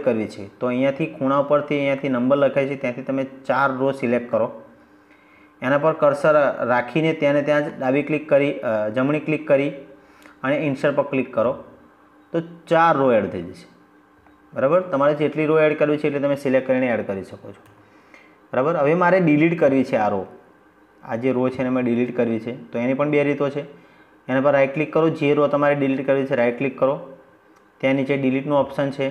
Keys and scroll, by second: 16.5 ctrl+z.